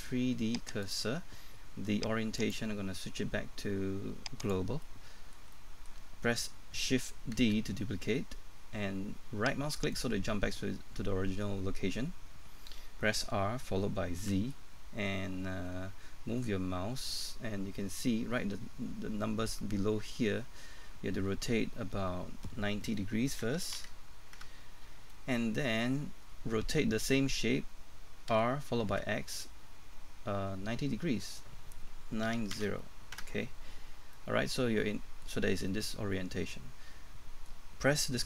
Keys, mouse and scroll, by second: 4.8 middle click, 7.4 shift+d, 9.8-10.9 right drag, 13.2-14.2 typing, 23.4 KP_9, 25.1 middle click, 28.3 typing, 32.3 KP_9, 34.1 KP_Enter, 34.1 middle click.